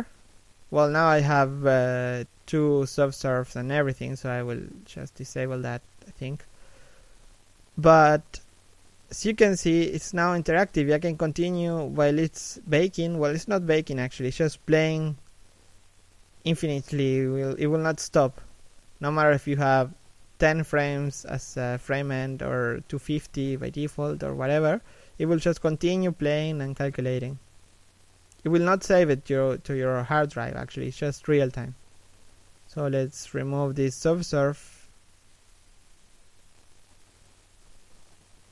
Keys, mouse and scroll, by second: 0.8 g, 2.9 g, 4.2 middle click, 6.9 middle click, 8.2 g, 10.0 g, 10.8 middle click, 12.5 right click, 16.5 right click, 16.8 g, 18.5 middle click, 19.0 g, 21.7 middle click, 25.0 middle click, 26.7 g, 28.7 g, 30.7 right click, 32.2 middle click, 33.0 middle click, 35.0 right click, 35.2 g, 37.2 right click, 37.3 g.